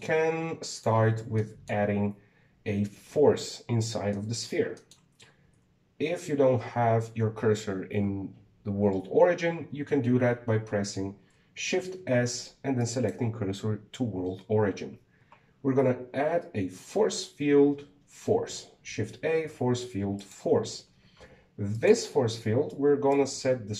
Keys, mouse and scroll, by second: 0.5-1.5 shift+middle drag, 1.5 click, 1.9 scroll down 3, 2.2-2.9 shift+middle drag, 3.8-6.2 shift+middle drag, 6.2 shift+a, 12.4 shift+s, 16.5 shift+a, 22.5 click.